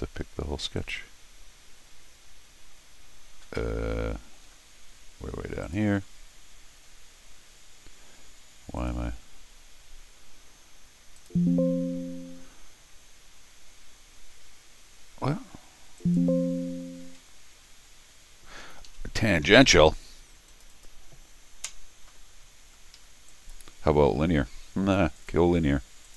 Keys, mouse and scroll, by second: 0.8 click, 5.6 click, 8.8 click, 9.6 scroll down 1, 11.2 click, 16.0 click, 17.0 space, 18.6 Escape, 18.8 Escape, 20.5 click, 20.7 click, 22.4 scroll down 2, 22.7 scroll up 2, 22.9 Escape, 23.3 click, 25.2 click, 26.0 click.